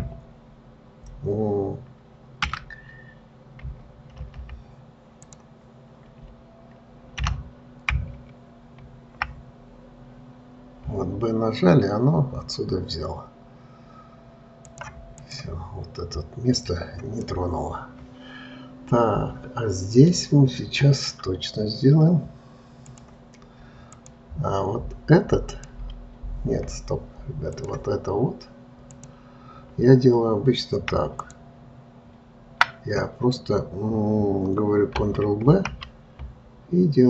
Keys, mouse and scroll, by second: 15.4 click, 17.6-20.7 middle drag, 23.2-24.4 drag, 25.9 click, 27.9-29.4 drag, 31.6 alt+click.